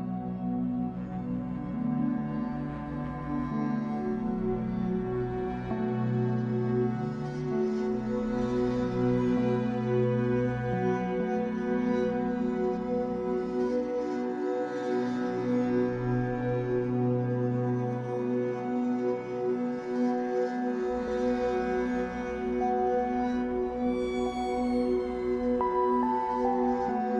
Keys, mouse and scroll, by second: 0.9 scroll down 1, 1.0-6.0 middle drag, 1.4 scroll down 1, 2.3-2.7 scroll up 1, 4.9 scroll up 1, 6.0 click, 6.3 middle click, 6.7 f, 7.2 click, 7.3-9.3 middle drag, 7.7 f, 9.3-21.5 drag, 10.4 ctrl+z, 21.5-22.7 shift+middle drag, 22.7-25.8 drag, 25.8-27.1 middle drag, 26.5-27.1 scroll up 2.